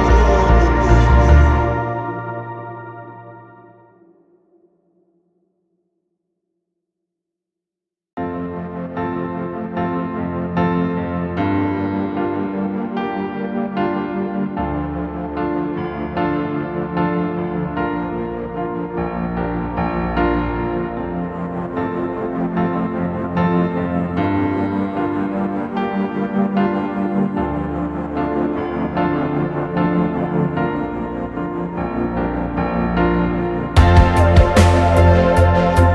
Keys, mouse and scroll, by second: 0.0-0.7 typing, 1.8 middle click, 2.1 scroll down 2, 2.3 space, 2.7-3.3 scroll up 4, 2.8 middle click, 3.4-3.7 scroll down 2, 3.8 scroll up 2, 4.1 r, 4.2 middle click, 5.2 space, 5.5 right click, 6.1 click, 6.5-12.5 typing, 7.9 Escape, 8.8 click, 9.4 middle click, 13.6 m, 14.7-17.9 typing, 18.0 scroll down 1, 18.1-18.5 scroll up 1, 18.6 scroll down 1, 18.9-19.7 scroll up 1, 19.8 middle click, 22.3-23.2 typing, 25.4 typing, 27.0-31.1 typing, 31.8 click, 32.1 space, 32.7 middle click, 32.8 middle click, 33.1 middle click, 33.3 scroll down 1, 33.9 space, 34.5 ctrl+s, 35.2 middle click, 35.5-35.9 typing.